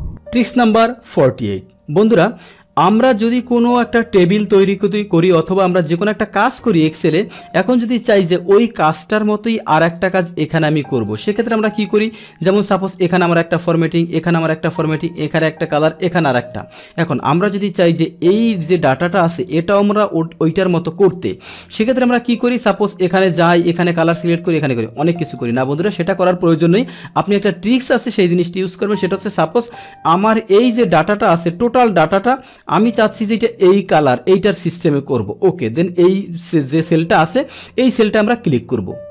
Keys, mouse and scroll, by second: 2.2 click, 9.8 click, 11.0 click, 13.0 click, 14.1 click, 15.1 click, 16.4 click, 18.5-19.5 drag, 23.3 click, 25.3 click, 30.1-31.5 drag, 32.4 click, 34.0 click.